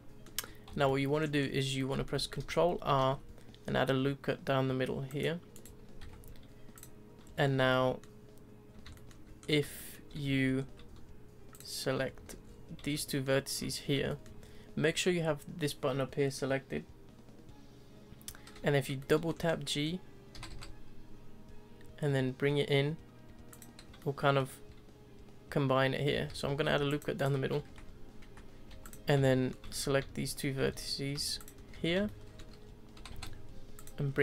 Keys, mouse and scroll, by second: 0.3 Tab, 0.8 shift+middle click, 1.4-1.8 scroll up 3, 1.8-3.0 middle drag, 3.0 ctrl+r, 6.0 1, 6.7 click, 7.3-7.7 scroll down 2, 7.7-9.4 shift+middle drag, 9.4-9.7 scroll up 2, 9.7-10.2 shift+middle drag, 10.2 z, 10.6-11.5 scroll up 1, 11.5 shift+click, 12.1 z, 12.4-12.9 scroll down 4, 12.9-17.1 shift+middle drag, 19.0-19.4 middle drag, 19.4-20.3 scroll up 3, 20.3 g, 23.9 scroll up 1, 24.0-24.4 middle drag, 24.4-26.1 scroll down 2, 26.1 ctrl+z, 26.6 ctrl+r, 27.6 3, 28.2 2, 28.7 1, 28.8 click, 29.3-29.7 shift+middle drag, 29.7 z, 30.6 z, 31.4 shift+click, 31.7 z, 32.0-33.0 shift+middle drag, 33.0 g, 34.1-34.2 scroll down 1.